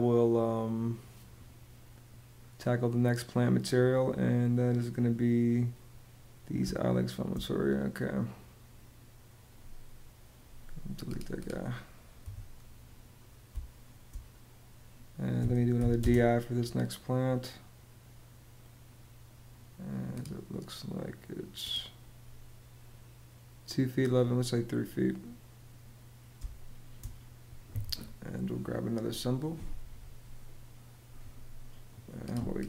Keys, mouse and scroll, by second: 6.4 space, 11.9 Delete, 13.2 space, 15.1 d, 15.5 i, 15.7 space, 26.0 space.